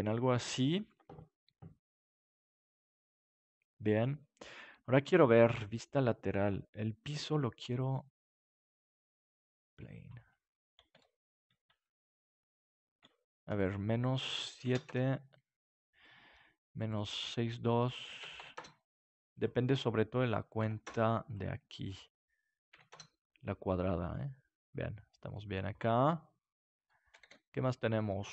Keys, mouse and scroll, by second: 5.7-7.4 drag, 7.2 KP_3, 8.2 middle click, 9.4-11.1 drag, 11.1-12.4 middle drag, 13.5-23.5 drag, 23.5 middle click, 27.2 ctrl+s.